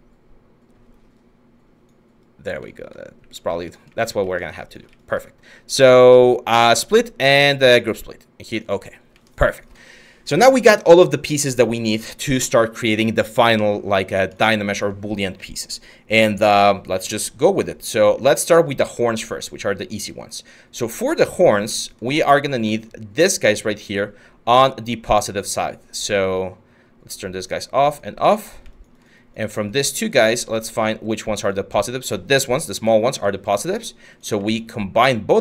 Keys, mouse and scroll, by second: 2.8 q.